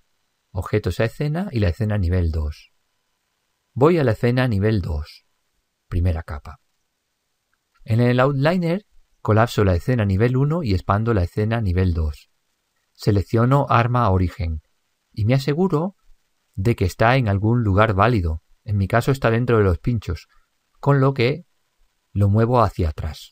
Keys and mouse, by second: 4.3 click, 6.3-10.5 drag, 10.4-13.7 middle drag, 14.1 click, 16.1-18.0 middle drag, 18.4-21.7 middle drag, 22.0 click.